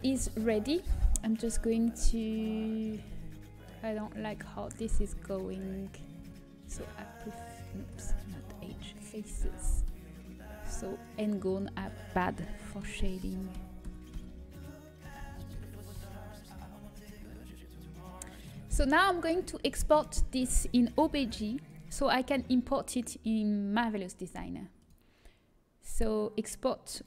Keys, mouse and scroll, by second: 3.1 middle click, 8.5 Delete, 8.5 ctrl+z, 9.2 Delete, 12.3 click, 12.3 right click, 13.2 f, 13.5 f, 14.1 f, 15.8 f, 17.2 Tab, 17.2 a, 17.5 middle click, 23.5 ctrl+s, 25.9-27.0 drag.